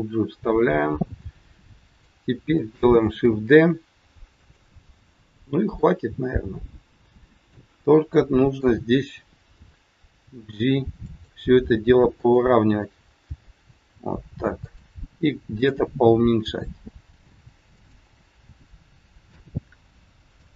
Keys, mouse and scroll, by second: 3.2 shift+d, 5.8 middle click, 7.9 middle click, 10.3 g, 12.0 click, 15.5 click, 16.4 g, 18.3 middle click.